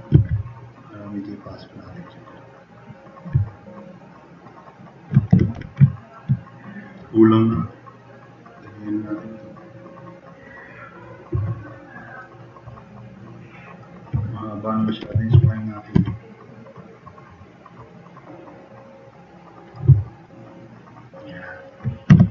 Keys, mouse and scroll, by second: 0.1 e, 0.8 click, 3.4-3.8 drag, 4.0-4.4 drag, 4.5 click, 5.3 4, 5.6 e, 5.9 click, 11.5 click, 11.9-12.2 drag, 12.6-13.7 drag, 15.0 1, 15.4 q, 15.9 e, 20.2-21.3 drag, 22.1 4.